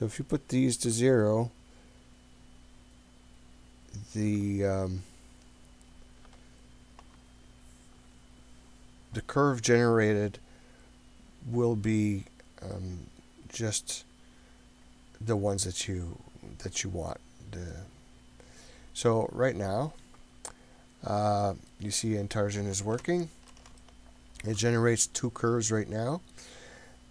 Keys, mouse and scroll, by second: 0.4-1.8 drag, 2.1-5.3 drag, 5.5-7.6 drag, 11.7-12.4 scroll up 3, 12.8-17.8 middle drag, 17.9-18.9 scroll up 4, 19.0-21.7 middle drag, 23.0-23.6 ctrl+middle drag, 23.8-24.6 shift+middle drag, 24.9-25.7 scroll up 5.